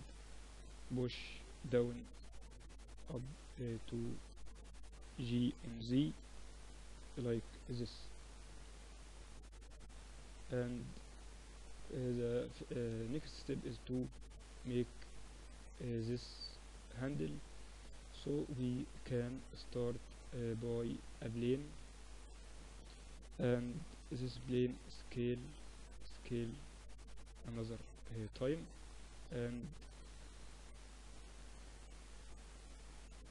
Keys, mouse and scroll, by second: 1.7 e, 5.8 g, 7.3-9.0 middle drag, 7.9 KP_1, 12.1 KP_1, 13.5 Tab, 14.5-17.3 middle drag, 17.3 click, 18.3-21.3 drag, 21.3 shift+a, 24.7 s, 25.1 s, 25.8 s, 26.6 s, 27.8 middle click, 28.3-30.3 drag, 29.9 s, 30.9 Tab, 31.3 a, 31.5 a, 32.5-33.3 drag, 32.7 a, 32.9 a.